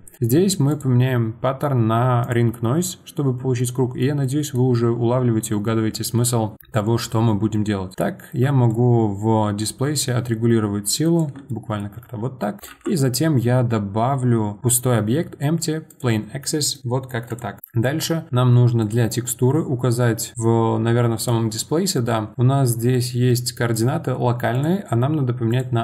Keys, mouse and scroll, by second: 0.7-3.6 drag, 3.6-7.9 middle drag, 7.9 click, 8.7-11.5 shift+drag, 11.5-12.7 middle drag, 12.7 shift+a, 17.4 click, 17.6 click, 18.8 click, 21.2 click, 24.5-25.8 drag.